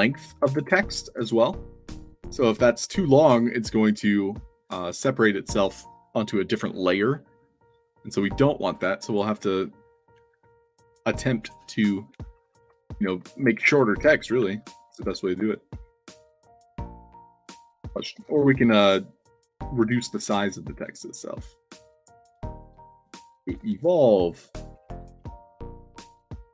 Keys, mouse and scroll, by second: 0.1-0.7 drag, 2.6 click, 8.9 click, 9.1 click, 16.8-18.7 typing, 19.3 click, 20.8 click, 22.1 click, 22.8-24.3 typing.